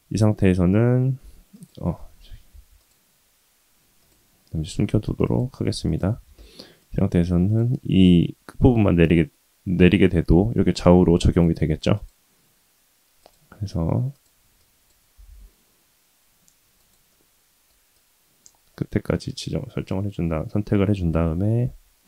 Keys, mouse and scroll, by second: 1.5 click, 2.5 Tab, 2.8 click, 4.0 click, 5.3 click, 5.8 click, 6.1 Tab, 6.8 click, 7.9 g, 11.9-14.2 drag, 14.6 click, 15.2 g, 17.1 middle click, 17.9 click, 18.7 middle click, 21.1 KP_1.